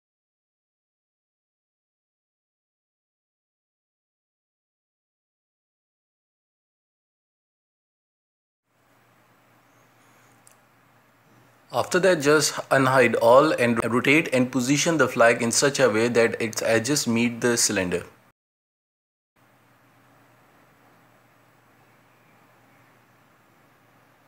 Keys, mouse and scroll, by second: 2.8-3.3 middle drag, 3.3 z, 3.8 middle click, 4.7 /, 5.6-6.8 middle drag, 6.8 g, 8.7 z, 9.5 z, 10.0 middle click, 10.2 space, 10.6-11.2 shift+middle drag, 11.2-11.6 scroll down 1, 11.6 KP_1, 12.2 middle drag, 12.5 r, 13.7 scroll down 3, 13.9 KP_1, 14.1 scroll up 3, 14.4 z, 15.9-16.2 scroll up 4, 16.0 shift+middle click, 16.3 g, 16.8-17.8 middle drag, 17.8 scroll down 2, 18.0 KP_1, 18.2 scroll up 5, 18.6 r, 19.4 scroll down 2, 19.6-19.9 middle drag, 19.9 z, 20.0 scroll down 1, 20.1-21.1 shift+middle drag, 21.1 scroll up 4, 22.0 space, 22.1 scroll down 2, 22.3-23.3 shift+middle drag, 23.3 s.